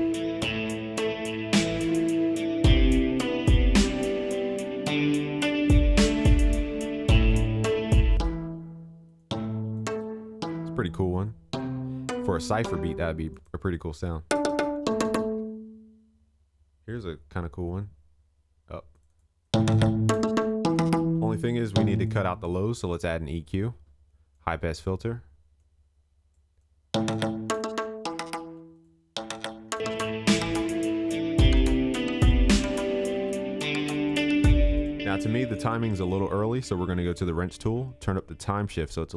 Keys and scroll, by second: 34.6 ctrl+s.